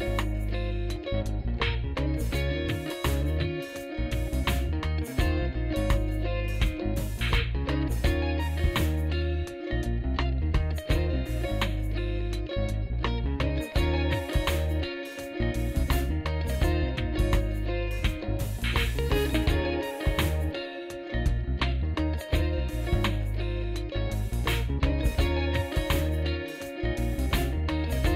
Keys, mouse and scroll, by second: 1.6 shift+s, 3.1 shift+s, 5.2 shift+s, 6.0 shift+s, 6.9 shift+s, 7.8 shift+s, 8.9 shift+s, 11.6 shift+s, 13.0 shift+s, 15.1 shift+s, 17.1 shift+s, 18.3 shift+s, 22.8 shift+s, 25.8 shift+s, 26.8 shift+s.